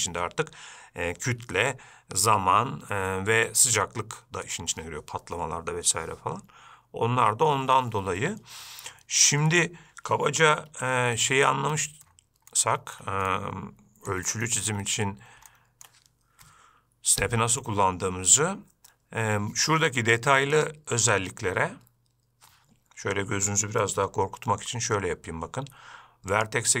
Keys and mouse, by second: 11.1 n, 12.9-13.3 shift+middle drag, 13.6-14.5 middle drag, 14.6-15.1 shift+middle drag, 15.9-16.2 shift+middle drag, 20.9-26.8 drag.